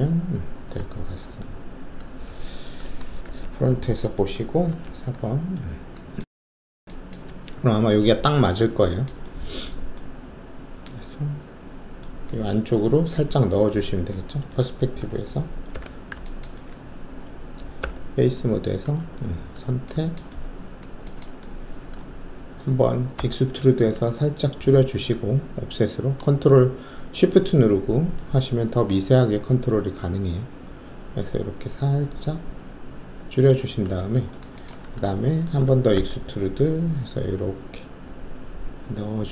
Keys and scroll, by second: 1.0 alt+w, 1.9 alt+`, 3.2 shift+3, 4.7 alt+4, 14.1 alt+shift+q, 15.7 5, 17.7 alt+3, 23.1 alt+w, 35.9 alt+w.